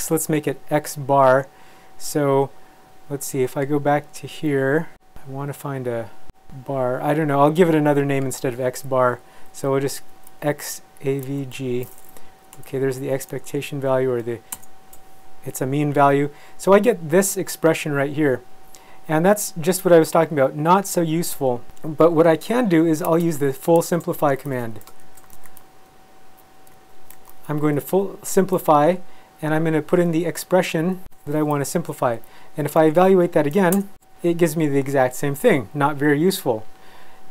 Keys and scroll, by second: 9.0 Left, 9.5 Right, 10.5 a, 11.2 v, 11.5 g, 14.5 shift+Return, 22.5 ;, 23.5-28.2 typing, 30.5 x, 30.9 a, 33.7 shift+Return.